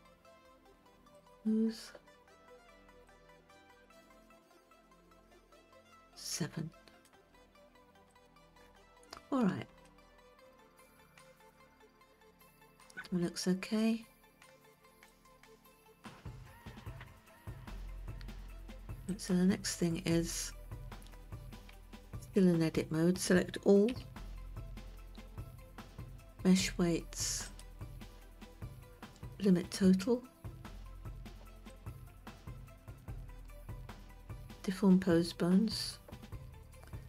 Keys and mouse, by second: 0.8 q, 3.6-7.7 drag, 10.4-11.4 shift+middle drag, 13.6 Tab, 15.7 click, 19.6 click, 22.2 Tab, 24.4 a, 28.0-32.4 drag.